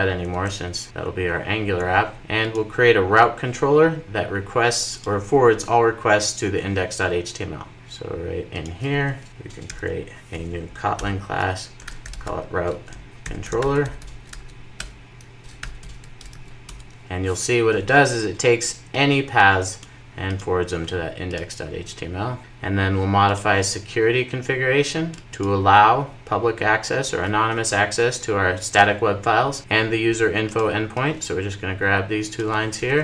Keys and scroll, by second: 0.1 Delete, 9.6 super+n, 16.7 Return, 16.9 super+s.